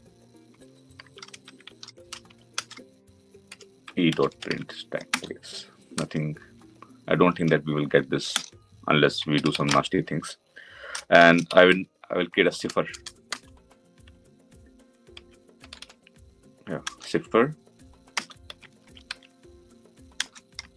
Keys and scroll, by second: 4.9 Return, 16.8 Return.